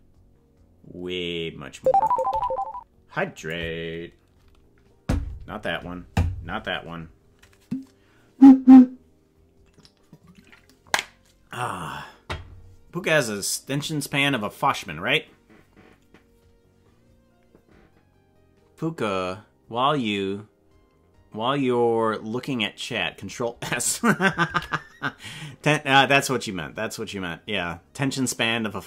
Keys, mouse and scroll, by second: 2.3 g, 24.6 ctrl+s.